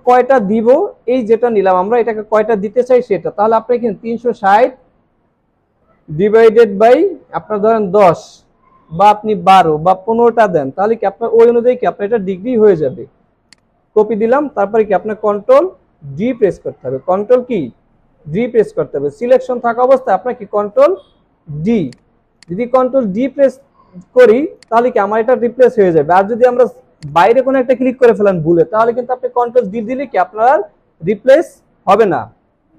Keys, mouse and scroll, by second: 8.0 typing, 15.2 ctrl+d, 16.0 ctrl+d, 16.2 ctrl+d, 19.1 alt+scroll down 1, 23.0 alt+scroll up 1, 24.4 space, 25.0 space.